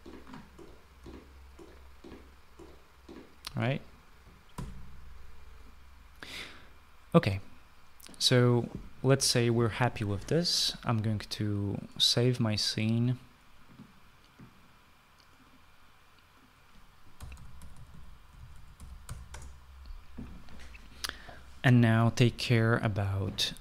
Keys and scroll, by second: 0.0-4.3 typing, 4.7 Escape, 6.2-7.0 typing, 13.6-14.3 typing, 17.2-19.8 typing.